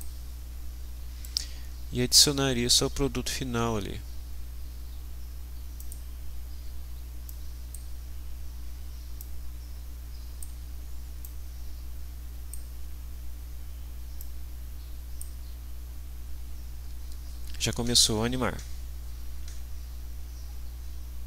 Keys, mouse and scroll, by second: 1.2 right click, 5.8 click, 7.3-7.9 drag, 9.2-10.6 drag, 11.2-12.7 drag, 14.2-15.4 drag.